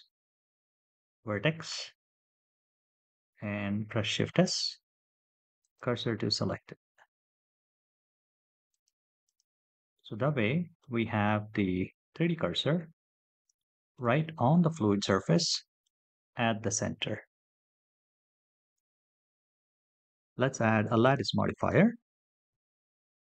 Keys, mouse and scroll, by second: 3.8 shift+s, 8.5 click, 9.7-10.6 middle drag, 10.8-12.4 scroll down 11, 13.3-13.7 shift+middle drag, 14.0-15.6 middle drag, 15.8-16.2 scroll up 4, 17.7-18.2 scroll down 4, 18.7-19.1 shift+middle drag, 19.3-20.0 middle drag, 20.1-21.2 drag, 22.6 shift+a.